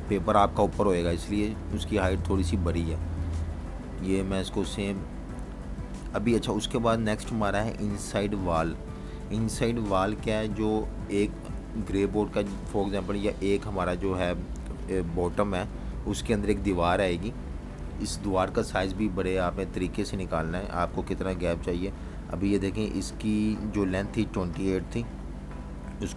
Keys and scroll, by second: 6.3 v, 9.7 Delete, 12.2 BackSpace, 15.0 z, 16.3 v, 16.5 space, 21.8 -, 23.0-24.3 typing.